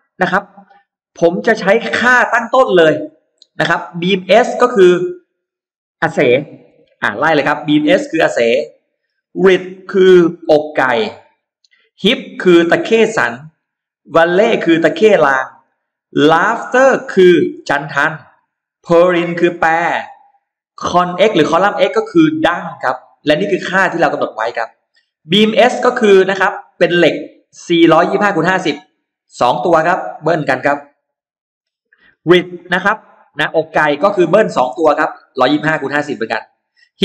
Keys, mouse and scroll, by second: 6.7 shift+x, 7.6 click, 9.3-11.1 drag, 12.1-13.1 drag, 13.9-15.1 drag, 16.0-17.9 drag, 18.8 click, 20.7-22.0 drag, 27.3 click, 28.5 shift+right click, 29.6 click, 29.8 click, 31.1 typing, 31.3 click, 33.7 click, 34.1 click, 34.6 typing, 35.3 click.